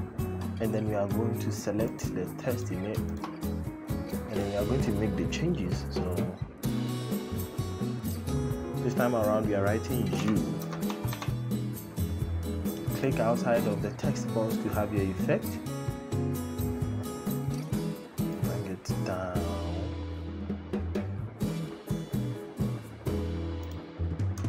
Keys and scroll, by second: 10.0 y, 10.3 Caps_Lock, 10.6 o, 10.8 u.